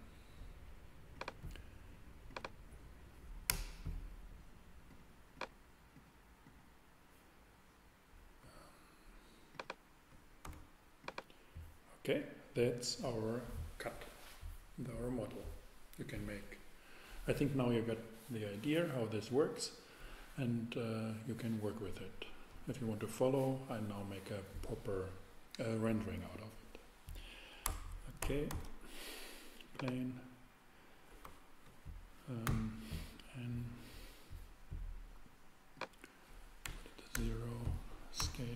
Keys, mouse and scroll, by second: 3.5 Return, 10.4 x, 11.2 x, 27.6 Tab, 27.9 Tab, 28.5 shift+a, 32.4 super+n, 35.7-37.5 drag, 36.6 0, 37.1 Return, 37.8-38.5 drag.